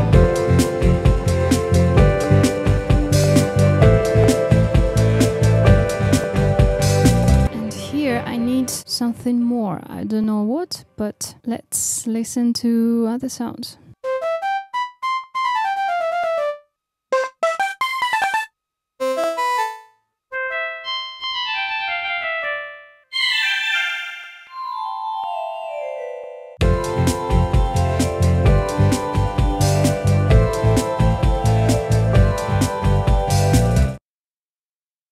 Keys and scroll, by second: 34.1 super+e, 34.4 space, 34.9 super+e.